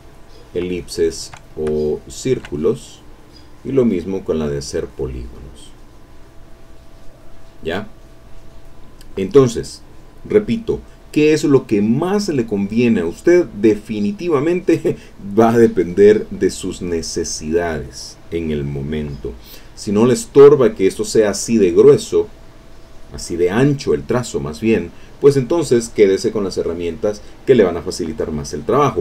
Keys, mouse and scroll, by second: 0.7 shift+click, 1.5-2.6 shift+drag, 3.6 click, 4.1 middle click, 4.9 click, 5.3 click, 5.7 click, 6.0 click, 6.3 click, 6.9 click, 8.0 middle click.